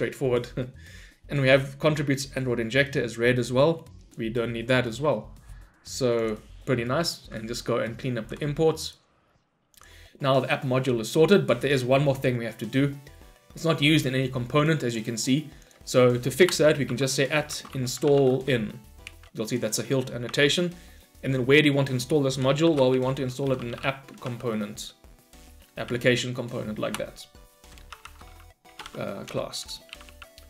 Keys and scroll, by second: 7.3 Delete, 7.4 ctrl+y, 19.1 Return, 27.0 Return.